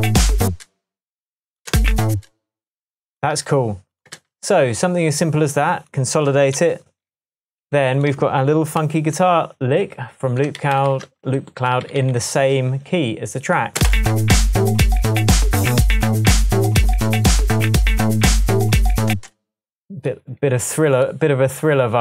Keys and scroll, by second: 0.5 space, 1.7 space, 3.4 super+c, 4.2 super+v, 6.6 super+j, 8.8 super+d, 10.6 super+d, 11.3 super+d, 13.8 space, 19.1 space.